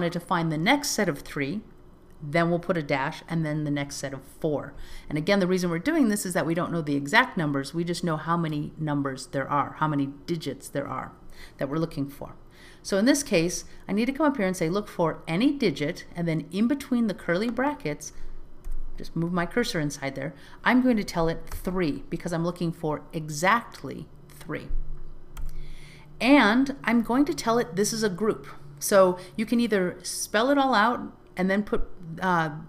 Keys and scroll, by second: 13.6 alt+z.